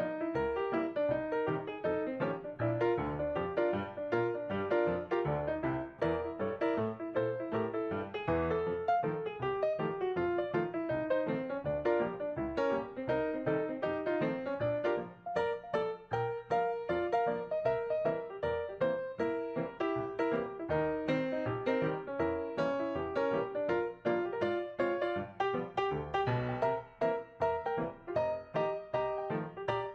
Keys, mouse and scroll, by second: 1.8 double click, 9.7 double click, 14.8 shift+click, 16.3-16.7 ctrl+scroll up 3, 18.2 Left, 18.2 Left, 18.4 Left, 18.7 Left, 18.9 Up, 19.2 Up, 19.6 Up, 20.9 Up, 23.0 Right, 26.0 ctrl+scroll down 2, 28.9 shift+click.